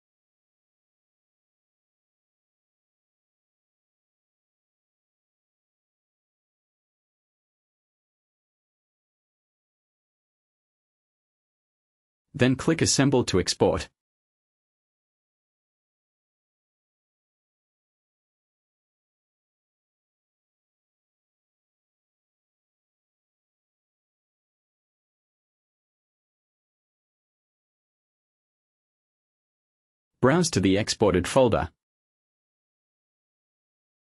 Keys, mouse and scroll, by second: 1.2 click, 3.4 click, 3.9 click, 4.4 click, 11.4 click, 15.4 click, 31.8 click, 33.5 click.